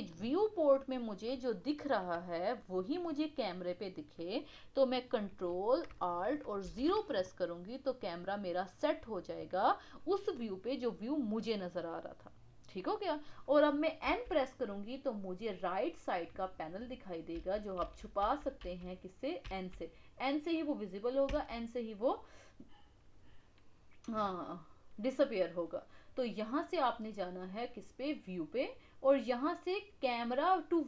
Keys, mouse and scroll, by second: 0.2-0.7 scroll up 1, 0.7-4.7 middle drag, 6.6 ctrl+alt+KP_0, 17.8 n, 28.1 click.